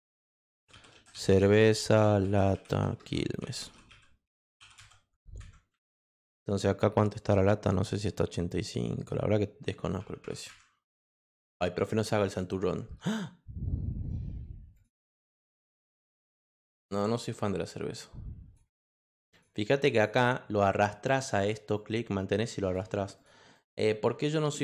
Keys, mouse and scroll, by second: 0.0-5.2 typing, 10.0 8, 14.7 click, 15.5 click, 15.7 Return, 16.5 click, 17.0-18.5 drag, 19.3 click, 19.9 click, 21.7 click, 23.1 click, 23.5 click.